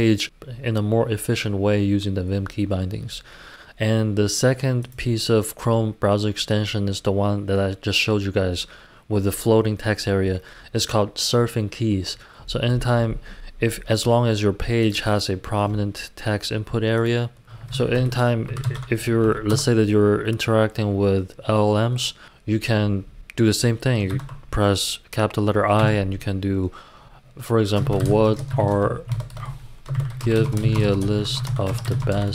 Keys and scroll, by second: 17.7 super+t, 18.2-19.2 typing, 19.5 Return, 20.4 typing, 24.1 shift+i, 25.7 i, 27.5-32.3 typing, 29.1 super+BackSpace, 29.3 super+BackSpace.